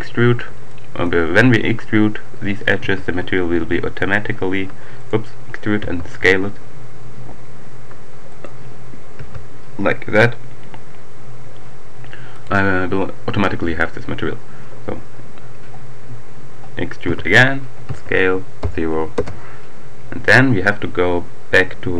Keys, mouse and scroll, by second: 0.1-0.7 scroll up 3, 0.7 shift+click, 2.8 e, 4.9 shift+click, 5.7 s, 8.2 click, 9.2 s, 12.1 click, 16.8 e, 17.6 s, 18.9 Return.